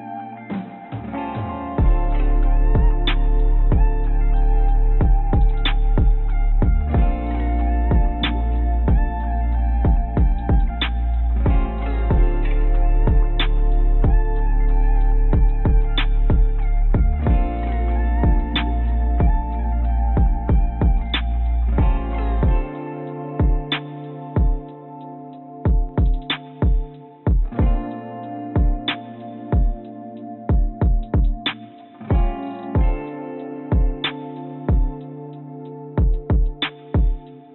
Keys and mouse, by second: 12.9 click, 20.5 Tab, 26.8 click, 27.8 click, 28.4-36.9 drag.